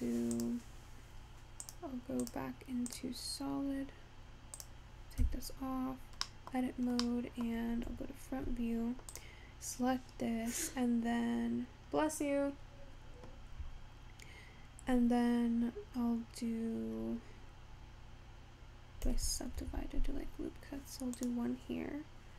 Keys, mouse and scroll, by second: 2.9 click, 4.7 click, 5.4 Tab, 6.4 middle click, 6.8 scroll up 2, 7.1 scroll down 1, 7.4 middle click, 8.1 `, 9.3 click, 19.6 ctrl+r.